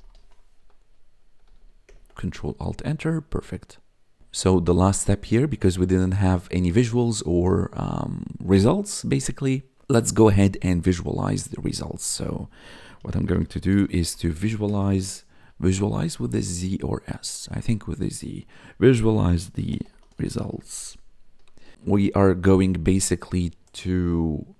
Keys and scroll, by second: 0.0-0.7 typing, 1.4 Right, 1.8 ctrl+alt+Return, 12.7-14.8 typing, 19.0-21.4 typing.